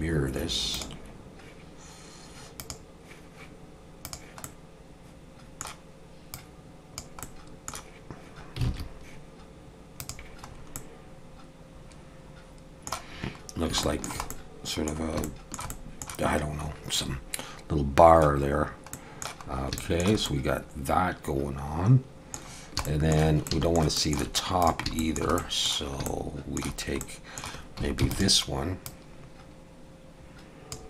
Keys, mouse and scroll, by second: 2.6 click, 4.0 click, 4.4 middle click, 6.3 click, 7.2 middle click, 8.6 alt+a, 10.1 click, 10.5 scroll up 2, 10.7 middle click, 13.5 scroll down 1, 13.8 shift+middle click, 14.3 middle click, 15.2 shift+middle click, 15.7 middle click, 18.5 scroll down 1, 18.9 middle click, 19.5 scroll up 2, 19.8 shift+middle click, 20.2 middle click, 22.5 scroll down 1, 22.8 shift+middle click, 23.5 middle click, 24.0 shift+middle click, 24.6 click, 25.0 shift+middle click, 25.4 middle click, 26.1 shift+middle click, 27.0 middle click, 28.0 shift+d, 28.9 click.